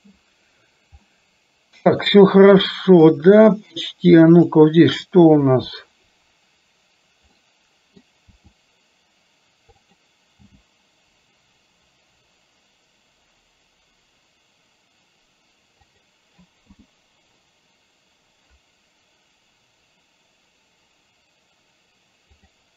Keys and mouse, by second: 1.0-2.2 middle drag, 2.7 middle click, 4.4 click, 7.4 middle click, 8.3 r, 10.4 g, 16.7 i, 22.6 click.